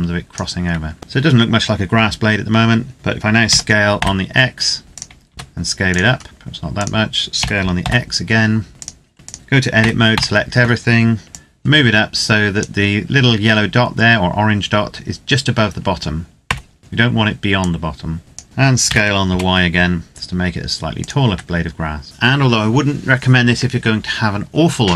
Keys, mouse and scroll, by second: 0.8 Tab, 1.0-2.8 scroll down 1, 3.2 s, 3.7 x, 4.8 click, 5.1 s, 5.6 click, 6.0 scroll down 1, 6.2 s, 6.5 click, 7.1 s, 7.6 x, 8.7 click, 9.3 Tab, 9.7 a, 9.9 a, 11.3 click, 13.8-15.5 scroll up 1, 16.3 Tab, 16.7-17.6 scroll down 1, 17.6 click, 18.4 scroll up 1, 18.6 s, 19.0 y, 20.7 click, 21.0 Tab, 22.0 middle click.